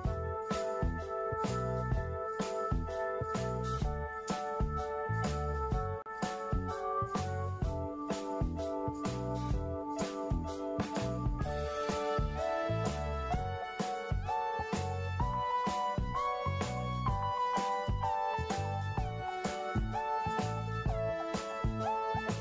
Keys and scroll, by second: 5.9 ctrl+y, 8.6 ctrl+0, 9.8 ctrl+y, 11.2 ctrl+y, 14.9 ctrl+shift+g, 18.1 Delete.